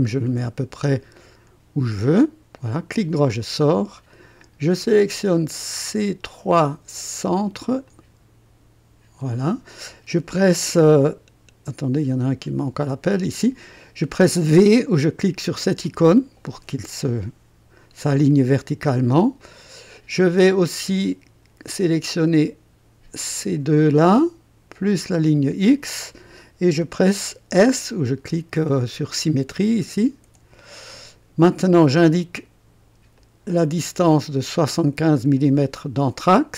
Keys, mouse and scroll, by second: 1.1 click, 2.2 click, 2.9 right click, 6.2 click, 7.8 click, 9.2 click, 12.8 click, 15.8 v, 19.4-20.9 drag, 21.0 click, 23.1 click, 24.8 click, 30.2 s, 33.1 click, 35.3 click.